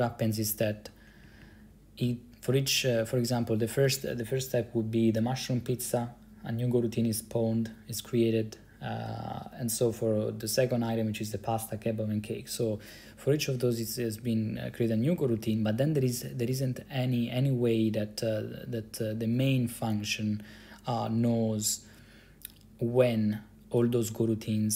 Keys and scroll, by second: 1.4 Down, 1.5 Down, 2.2 Up, 2.7 Up, 15.2 Down, 15.4 Down, 15.6 Down, 15.7 Down, 16.6 Up.